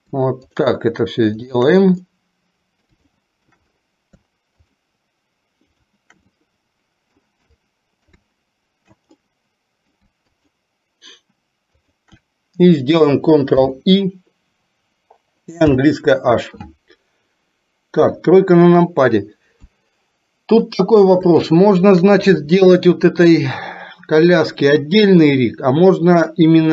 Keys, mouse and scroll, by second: 1.5 shift+click, 2.1 middle click, 3.1 shift+middle click, 5.6 shift+click, 6.4 middle click, 7.6 middle click, 9.3-10.0 middle drag, 10.3 shift+click, 11.9 shift+click, 13.6 ctrl+i, 15.8 h, 18.0 KP_3, 19.8-20.6 middle drag, 21.5-22.0 shift+middle drag.